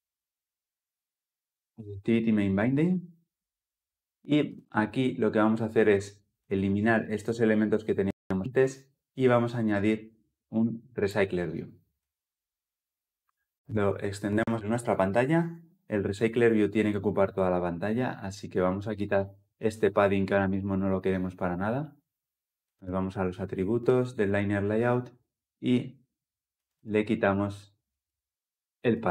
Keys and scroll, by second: 0.1 ctrl+alt+Left, 2.8 ctrl+b, 7.4 Delete.